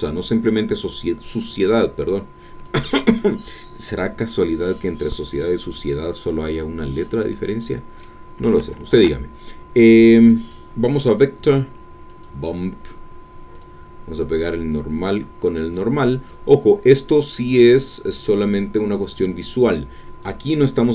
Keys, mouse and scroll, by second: 1.7-2.8 drag, 7.3-8.5 drag, 8.9 shift+a, 12.1 click, 13.5 click, 14.7-15.9 drag, 16.6-17.1 scroll up 4, 17.9-18.3 scroll up 2, 19.5 click.